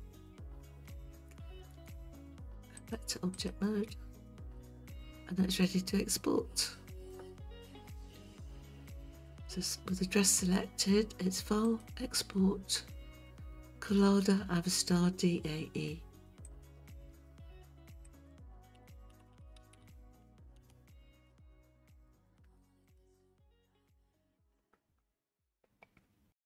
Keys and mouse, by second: 0.9 Tab, 2.8-3.5 drag, 4.6-7.1 middle drag, 11.7-16.7 drag.